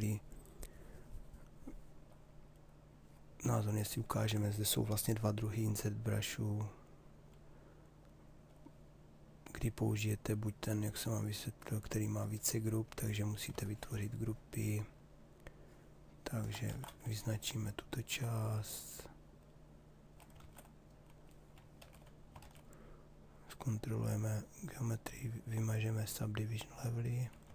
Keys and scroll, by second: 16.2 ctrl+z, 21.8 shift+f, 27.1 ctrl+z.